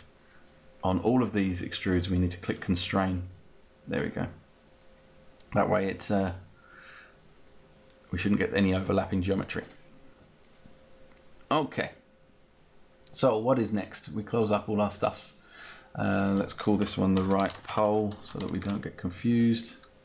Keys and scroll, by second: 16.6-18.7 typing.